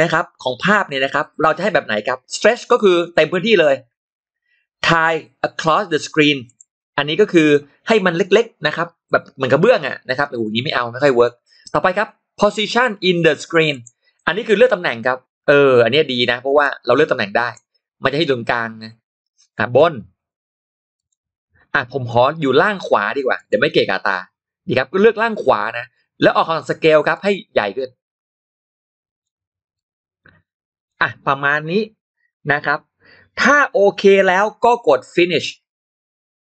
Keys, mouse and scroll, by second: 6.3 click, 8.9 click, 13.6 click, 16.5 click, 19.3 click, 20.8 click, 23.2 click, 27.0-29.1 drag, 29.6-30.7 drag.